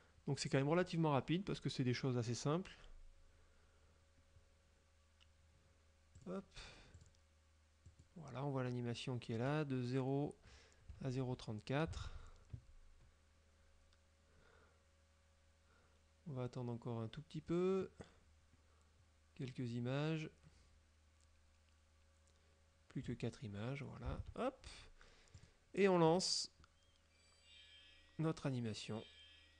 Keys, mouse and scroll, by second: 6.3 click, 7.0 click, 7.9 click, 12.1 alt+Tab, 24.3 alt+Tab, 25.4 right click, 26.1 click.